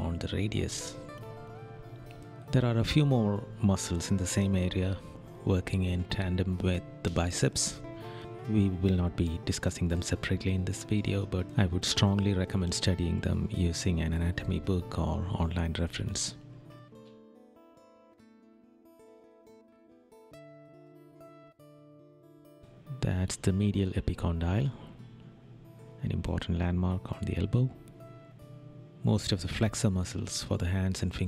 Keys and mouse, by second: 4.4 right click, 8.8 right click, 13.7 right click, 18.0 right click, 23.3 right click, 27.0 right click.